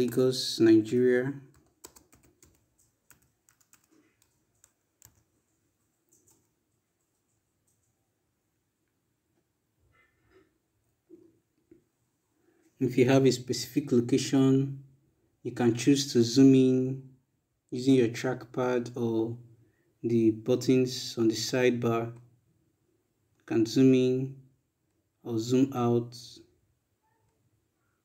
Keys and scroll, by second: 0.0-1.1 typing, 2.1-5.3 typing, 6.6 Return.